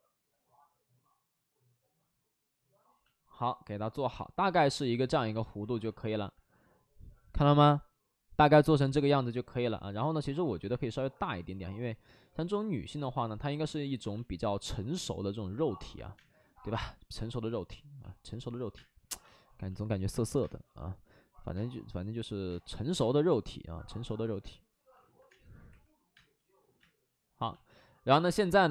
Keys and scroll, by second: 9.5 3, 10.4 ctrl+z, 14.1 space, 16.1 space, 16.6 space, 18.7 space, 19.2 space, 20.9 space, 25.2 space, 25.6 3, 26.1 space, 26.7 space.